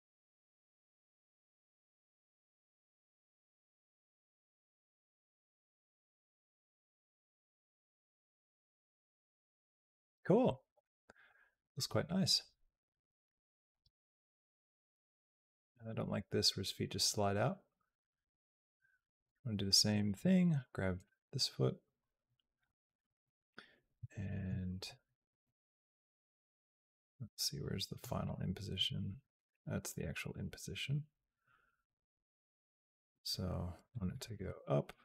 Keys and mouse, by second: 9.7 space, 11.1-13.5 drag, 13.6 space, 14.7 space, 15.4-19.1 drag, 20.8 click, 22.6 click, 24.0 shift+click, 25.3-27.8 drag, 28.0 click, 28.5 click, 29.0 x, 29.8-33.8 drag, 34.1 g.